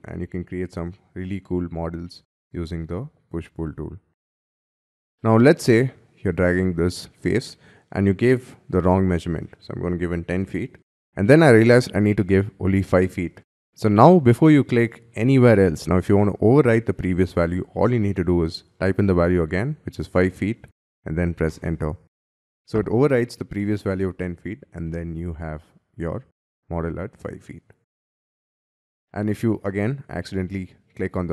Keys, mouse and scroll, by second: 2.0 middle click, 4.0 middle click, 4.5 scroll down 6, 5.0 middle click, 5.4 scroll down 7, 5.8 scroll up 5, 8.6 1, 9.2 0, 9.9 ', 10.2 Return, 19.0 5, 20.1 ', 21.4 Return, 24.8 middle click, 26.1 middle click, 28.8 middle click, 29.6-30.0 scroll down 6.